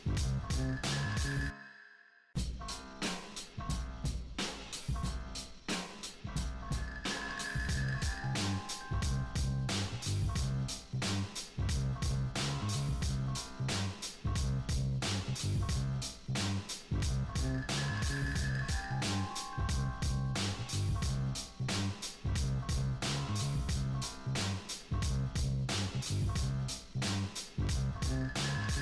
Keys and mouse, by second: 1.1 click, 1.3 click, 2.0 drag, 3.4-3.9 middle drag, 3.9 click, 4.2-5.0 drag, 5.0 middle drag, 5.1 drag, 5.5 middle drag, 5.5 drag, 5.7 middle click, 5.8 click, 6.2-6.8 drag, 7.7 click, 8.0 drag, 8.5 click, 9.1 drag, 9.5 middle click, 10.1-10.7 drag, 10.4 f, 11.1-11.7 drag, 11.8 middle click, 11.9 alt+f, 12.6 click, 15.0 click, 15.8 ctrl+z, 16.4 click, 17.2-17.5 drag, 17.7 click, 18.2 click, 18.5-19.0 drag, 19.1-19.8 middle drag, 19.9 middle click, 20.0 click, 20.3 click, 20.7 middle click, 21.2 click, 22.0-23.2 drag, 23.2-23.6 drag, 23.8 click, 23.9 middle drag, 24.1-24.5 drag, 25.2 click, 25.6 click, 25.7 middle click, 26.1-26.6 drag, 26.9-28.0 drag, 28.4-28.7 middle drag.